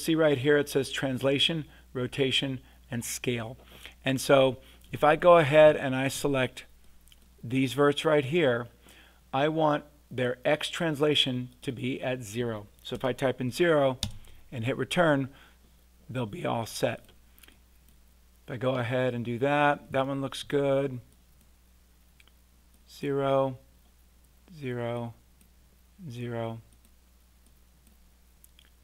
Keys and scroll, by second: 12.9 0, 14.0 Return.